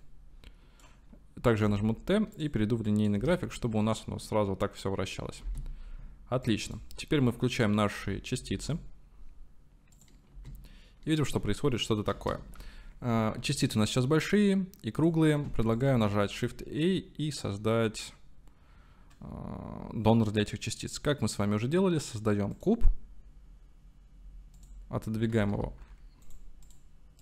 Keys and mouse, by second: 1.7 t, 2.9 click, 3.2 space, 5.5 space, 6.5 click, 8.6 click, 10.4 space, 12.4 space, 13.6-15.2 drag, 16.1 shift+a, 24.6 click, 25.4 g, 25.7 y, 26.3 click, 26.6 click.